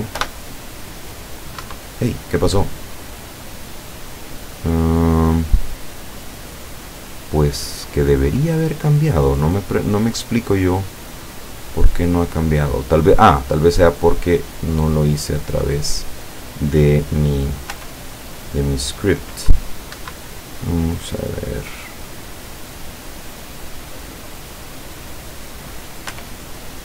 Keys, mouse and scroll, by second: 0.2 p, 1.7 Escape, 2.7-3.0 scroll down 2, 3.3-3.6 scroll down 2, 5.4-5.8 scroll up 2, 7.6-9.2 scroll up 7, 9.3 scroll up 2, 11.9-12.6 scroll up 3, 12.8-13.4 scroll down 2, 13.4-15.9 middle drag, 17.8 p, 20.0 Escape, 20.8-22.1 scroll down 4, 22.5 scroll up 1, 23.3 click, 25.0 click, 26.2 p.